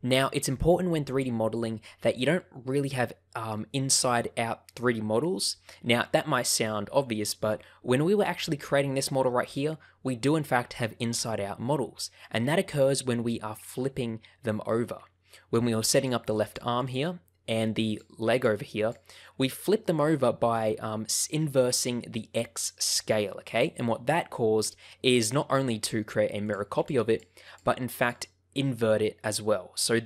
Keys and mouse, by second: 1.0 click, 7.8 middle click, 15.9 click, 16.4 click, 16.7 click, 17.8 click, 18.2 click, 26.7 click, 27.0 click, 27.4 click, 27.9 click.